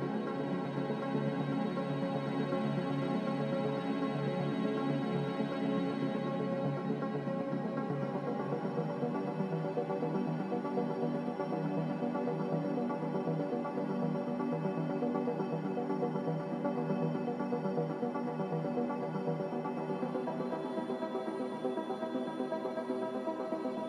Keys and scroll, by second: 10.8 z, 15.1-16.0 typing.